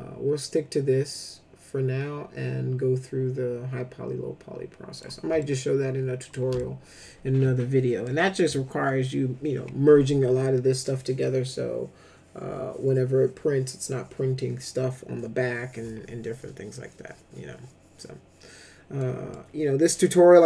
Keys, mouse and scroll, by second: 5.3 alt+shift+middle click, 6.5-8.0 middle drag, 18.9 middle click.